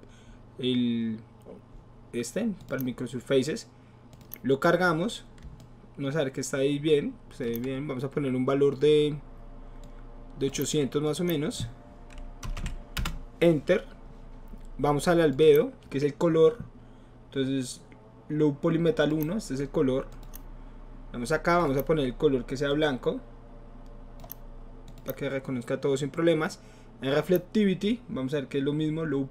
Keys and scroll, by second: 12.5 BackSpace, 12.7 KP_8, 13.0 Return.